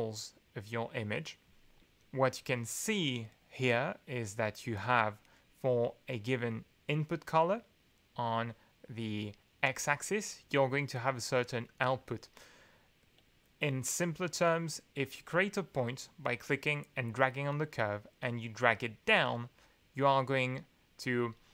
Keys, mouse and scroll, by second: 15.0-21.1 drag.